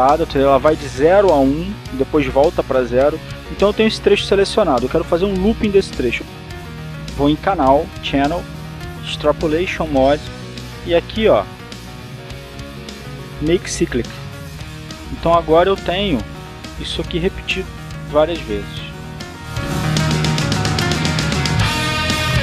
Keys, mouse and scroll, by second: 7.5 click, 15.5 click, 18.0-21.9 drag, 22.3 click.